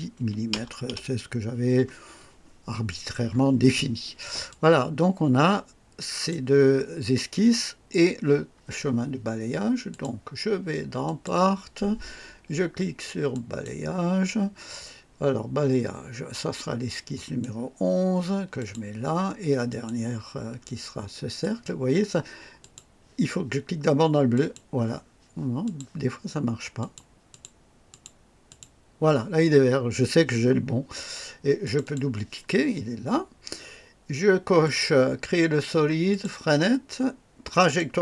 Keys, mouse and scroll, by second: 0.2 KP_1, 0.8 KP_0, 4.5-6.5 drag, 9.9 click, 11.0 click, 13.3 click, 17.1 click, 18.5 click, 19.7 click, 21.4 click, 22.6 click, 24.3 click, 25.6 click, 26.8 click, 27.3 click, 27.9 click, 28.4 click, 31.6 click, 34.6 click, 36.1 click, 37.6 click.